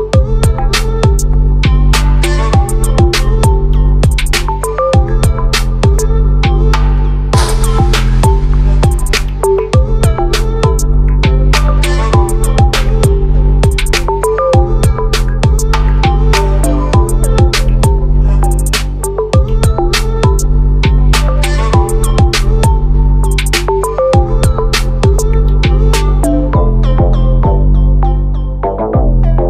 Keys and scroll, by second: 16.0 ctrl+-, 16.2 ctrl+-.